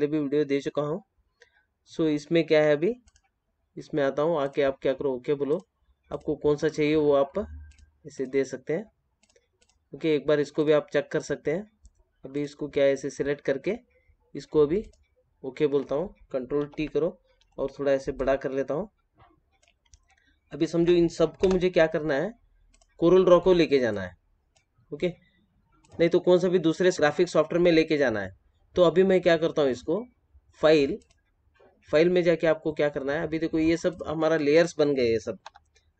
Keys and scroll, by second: 16.5 ctrl+t, 35.4 F7.